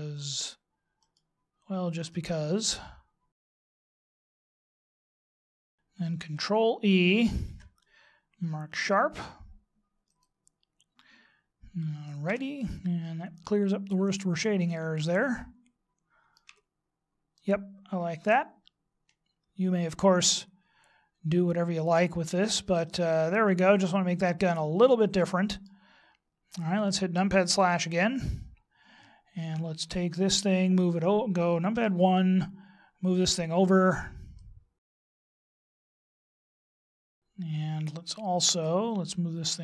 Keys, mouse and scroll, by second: 1.0 alt+shift+right click, 2.1 alt+shift+right click, 3.5 alt+shift+right click, 3.9 alt+shift+right click, 5.6 alt+shift+right click, 7.3 ctrl+e, 12.3 Tab, 14.3 Tab, 14.9 middle click, 16.4 Tab, 17.3 middle click, 25.5-26.2 scroll down 2, 26.2-26.8 scroll down 1, 27.5 KP_Divide, 31.7 KP_1, 34.4 click, 36.2 click, 36.6 middle click.